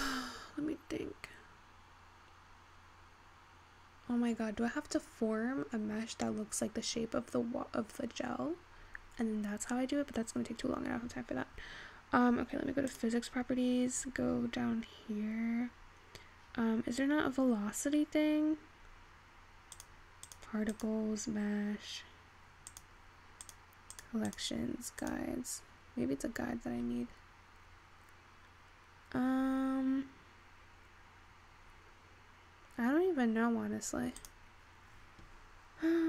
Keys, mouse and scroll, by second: 10.1-12.1 scroll down 9, 15.8-16.3 scroll up 1, 16.3-18.1 scroll up 2, 18.1-25.3 scroll down 10, 25.3 click, 27.0-30.0 scroll up 10, 30.0-31.8 scroll up 1, 31.8-36.0 scroll up 4.